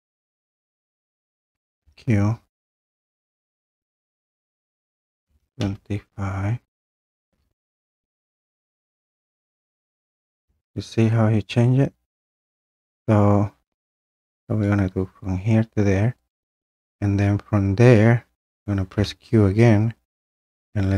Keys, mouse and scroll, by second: 1.8 q, 5.0-6.1 typing, 7.3 BackSpace, 9.4 click, 11.2-14.4 drag, 16.3 click, 18.9 q.